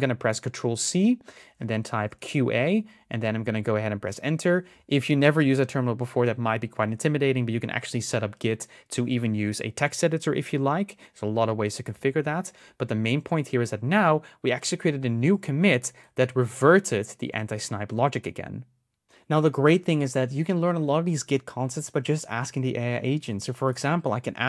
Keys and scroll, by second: 0.5 ctrl+c.